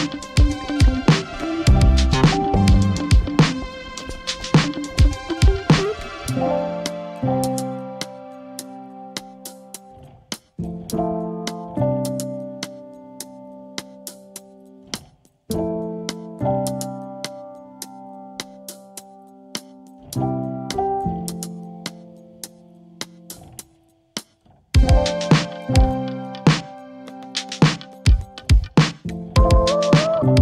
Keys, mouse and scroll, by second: 3.3 Up, 3.6 Up, 4.0 Up, 5.2-5.6 typing, 11.9-14.5 typing.